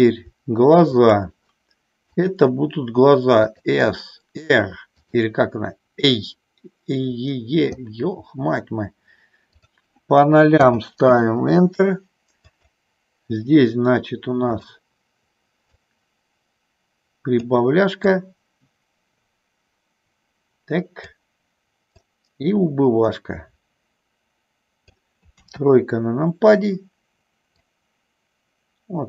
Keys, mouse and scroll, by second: 2.3-3.7 drag, 5.2 click, 9.4-11.4 drag, 12.4-14.7 drag, 15.7-17.4 drag, 18.2-21.2 drag, 21.9-25.0 drag, 25.4 KP_3, 27.5-29.0 drag.